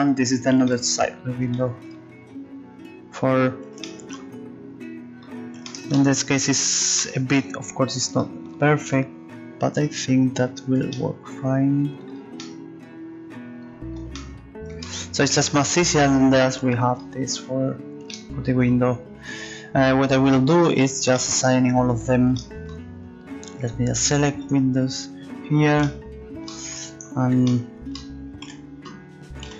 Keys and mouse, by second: 12.6-14.4 middle drag, 23.2-26.8 middle drag, 23.6-28.4 drag, 28.4 a, 29.4 c.